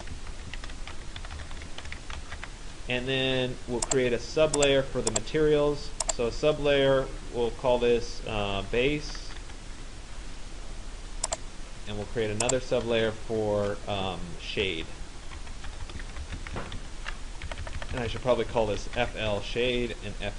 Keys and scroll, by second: 0.2 Caps_Lock, 15.2 BackSpace, 17.5 Left.